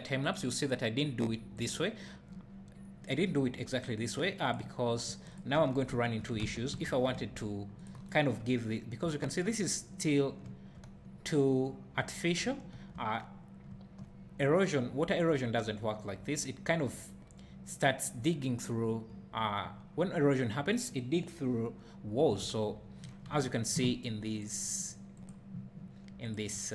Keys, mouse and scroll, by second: 5.3 click, 5.6 Tab, 6.4 alt+a, 6.9 ctrl+r, 8.1 right click, 8.3 Tab, 9.1 `, 22.4 Tab.